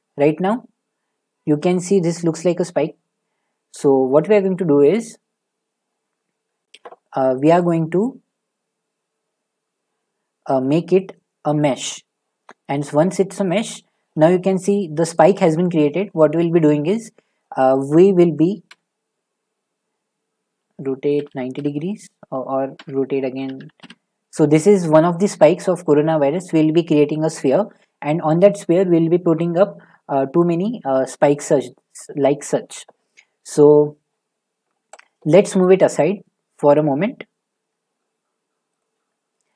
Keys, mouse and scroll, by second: 8.8 click, 11.8 click, 13.8 middle click, 15.9 middle click, 16.5 middle click, 17.4 middle click, 17.6 click, 18.7 r, 21.2-21.6 typing, 22.8-24.0 typing, 25.3 shift+middle click, 25.8 middle click, 35.0 click, 35.3-36.2 scroll down 5, 36.2 middle click, 36.8 g, 38.8 click.